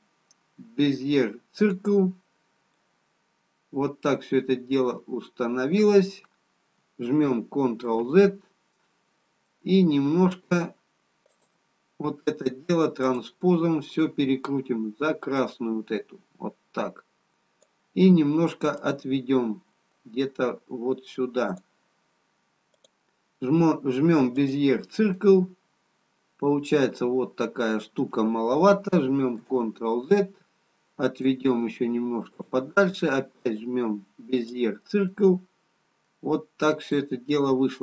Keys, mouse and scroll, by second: 3.2 middle click, 10.1 ctrl+z, 10.1 middle click, 11.3 click, 18.7 click, 25.6 middle click, 30.2 ctrl+z, 31.3 click, 33.4 click, 35.1 middle click.